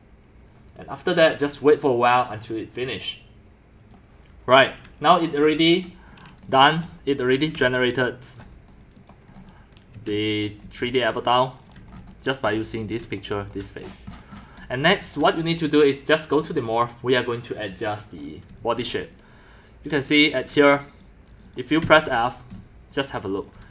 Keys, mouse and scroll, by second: 0.7-1.5 drag, 2.2 click, 3.9 click, 5.1 click, 5.8 middle click, 5.8-6.3 scroll, 6.6 drag, 6.8 scroll, 7.2-8.9 typing, 9.1 click, 9.4-9.7 scroll, 10.0 middle click, 10.0-15.4 typing, 10.2-11.5 drag, 11.8 click, 12.0 shift+scroll up 10, 12.2 shift+click, 12.3 shift+scroll, 13.2 click, 13.9-14.6 scroll, 15.2-18.5 drag, 18.2-20.5 typing, 19.5 click, 20.1 click, 21.0 click, 21.9-23.7 typing, 23.1-23.6 drag.